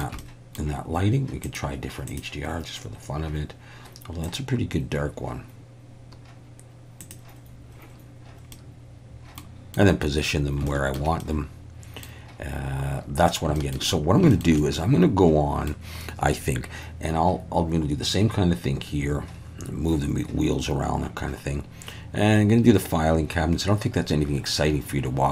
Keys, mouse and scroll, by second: 0.2 middle click, 1.6-7.8 drag, 8.5 middle click, 9.7 middle click, 10.7 shift+middle click, 11.3 middle click, 13.6 shift+middle click, 14.4 shift+middle click, 14.6-15.8 middle drag.